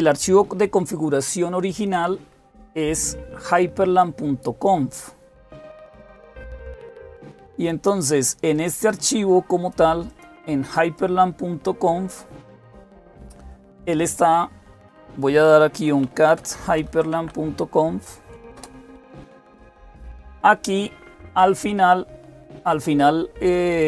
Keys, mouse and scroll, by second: 5.4-12.6 drag, 13.8 click, 15.4-17.2 typing, 18.3 Return, 23.3-23.8 drag.